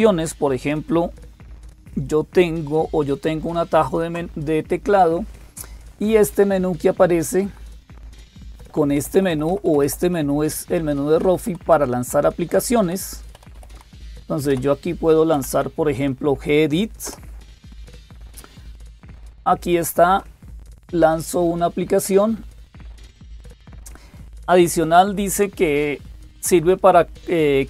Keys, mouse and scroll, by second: 0.0-27.6 typing, 3.2 alt+super+d, 7.2 Down, 7.6 Down, 7.8 Down, 8.0 Down, 8.1 Down, 8.5 Down, 8.8 Up, 9.0 Up, 9.1 Up, 9.3 Up, 9.8 Up, 11.0 Down, 11.3 Down, 11.5 Down, 11.6 Down, 13.2 Down, 13.4 Up, 13.8 Up, 16.9 Up, 22.8 click.